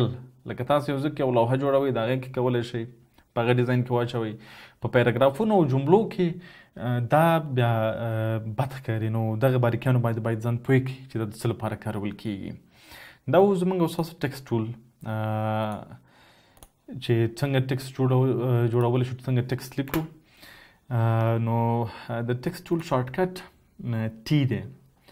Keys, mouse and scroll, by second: 13.9 right click, 19.9 Delete, 22.7 right click.